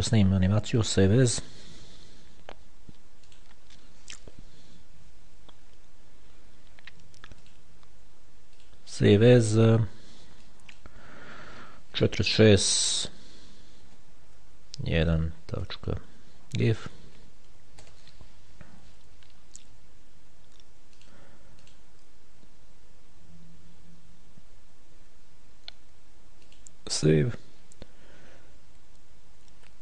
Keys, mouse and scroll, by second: 1.1 click, 3.6 click, 7.7 click, 8.9 click, 10.7 click, 12.2 4, 14.1 KP_Subtract, 14.5 1, 16.0 ., 17.3 g, 17.8 f, 21.3-22.5 drag, 26.8 click.